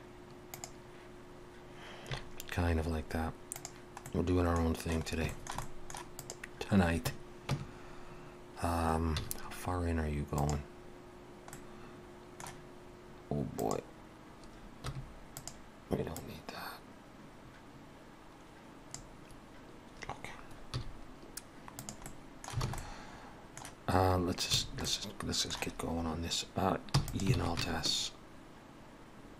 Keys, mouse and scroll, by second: 4.0 middle click, 5.3 shift+middle click, 5.6 middle click, 6.2 click, 7.5 Tab, 9.2 z, 11.6 middle click, 13.6 click, 14.9 2, 15.4 click, 16.1 click, 21.9 z, 22.1 middle click, 22.7 alt+a, 22.8 middle click, 24.6 a, 24.9 middle click, 27.0 e, 27.4 alt+s.